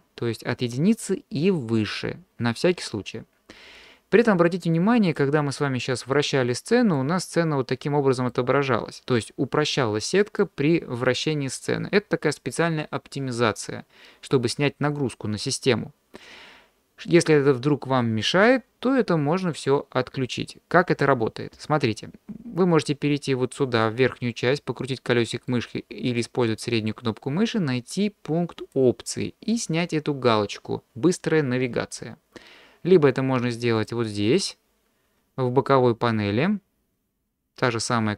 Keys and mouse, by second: 5.1 click, 6.1 middle click, 7.3 middle click, 9.1-10.4 middle drag, 23.9-25.5 middle drag, 26.5 middle click, 28.7-32.8 drag, 33.8 click.